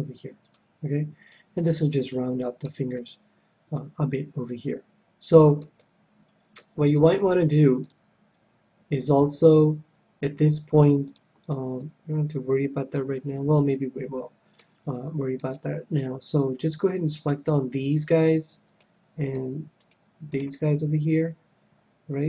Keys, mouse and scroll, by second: 0.5-1.9 drag, 1.2 middle click, 2.0-4.9 middle drag, 5.6-9.5 middle drag, 7.5 scroll up 1, 10.9-12.6 drag, 11.7-15.3 middle drag, 15.3-18.9 right drag, 18.9-20.4 middle drag, 19.7-22.1 right drag.